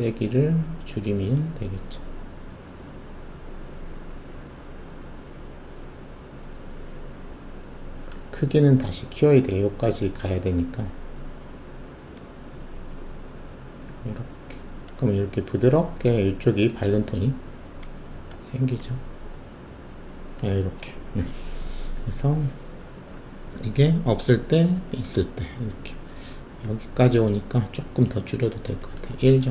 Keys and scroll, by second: 29.4 1.